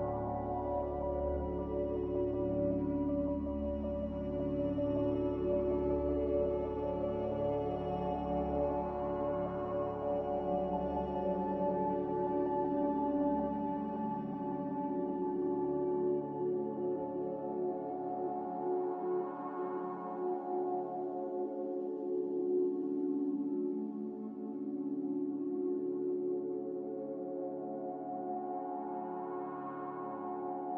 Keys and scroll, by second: 1.8-4.0 typing, 6.8 Return, 7.5-8.3 typing, 11.5 a, 12.9 ctrl+k, 18.2 a, 21.8 z, 22.7 Delete, 25.0 n, 27.0 ctrl+w.